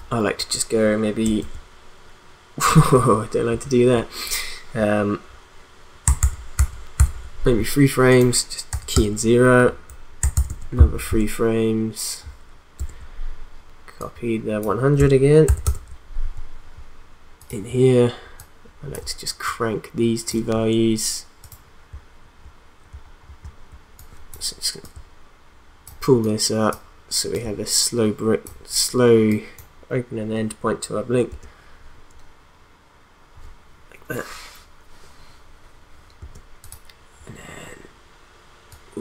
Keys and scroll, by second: 6.2 ctrl+Right, 6.7 ctrl+Right, 7.3 ctrl+Right, 8.7 0, 8.9 Return, 10.3 ctrl+Right, 12.7 ctrl+Right, 15.5 ctrl+c, 15.6 ctrl+v, 31.3 space, 36.2 space.